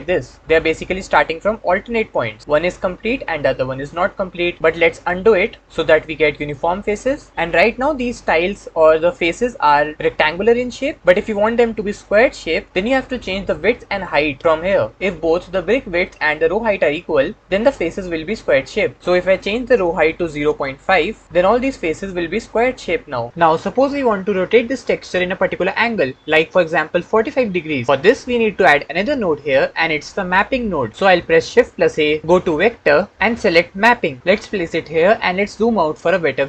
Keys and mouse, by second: 12.9 middle click, 19.7-21.2 drag, 31.8 shift+a.